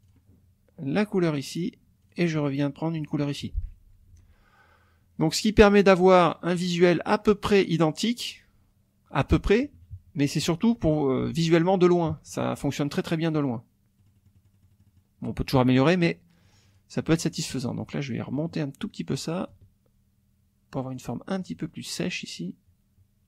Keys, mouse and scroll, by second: 0.0 click, 0.9 click, 2.0 click, 2.9 click, 4.1 F1, 9.8 KP_Subtract, 11.2 F1, 11.6 click, 12.1 KP_Subtract, 14.0 click, 14.4 middle click, 15.5 middle click, 16.4 click, 17.7-19.2 ctrl+drag, 19.5-21.1 ctrl+drag, 21.4-23.2 ctrl+drag.